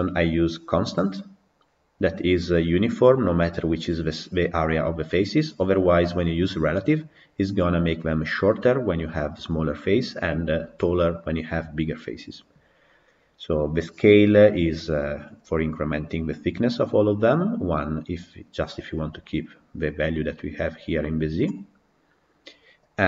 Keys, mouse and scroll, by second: 18.4 scroll down 11, 21.6 scroll up 2.